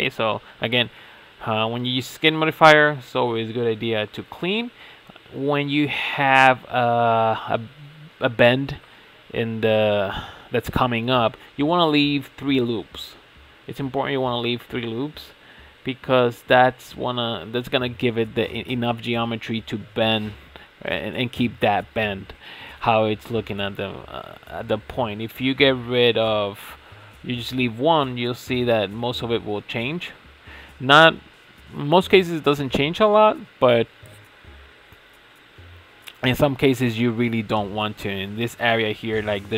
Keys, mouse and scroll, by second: 0.1-1.6 middle drag, 1.6 alt+click, 2.4 alt+shift+click, 3.1 alt+shift+click, 3.5 alt+shift+click, 3.9-5.2 shift+middle drag, 5.2 ctrl+x, 5.5 shift+middle click, 6.2 alt+click, 6.6 alt+shift+click, 6.9 alt+shift+click, 7.3 alt+shift+click, 7.7 alt+shift+click, 8.2 shift+middle click, 9.2 alt+shift+click, 9.6-11.1 middle drag, 11.1 alt+shift+click, 11.7-14.7 shift+middle drag, 15.4 shift+click, 16.3 alt+shift+click, 16.5 alt+shift+click, 16.9 alt+shift+click, 17.7 ctrl+x, 18.3 shift+middle click, 18.8-19.7 scroll down 5, 19.7 shift+middle click, 20.5 scroll up 5, 21.3-21.7 scroll down 3, 21.7-22.7 shift+middle drag, 22.7 scroll up 4, 22.9 middle click, 23.8 alt+click, 24.4 alt+shift+click, 25.2 ctrl+x, 26.5 alt+click, 26.9 alt+shift+click, 27.6 ctrl+x, 29.3 shift+middle click, 30.0 alt+click, 30.3 alt+shift+click, 31.5 ctrl+x, 32.0 middle click, 32.8 alt+click, 33.2 alt+shift+click, 33.6 alt+shift+click, 34.9 alt+shift+click, 37.9 alt+shift+click.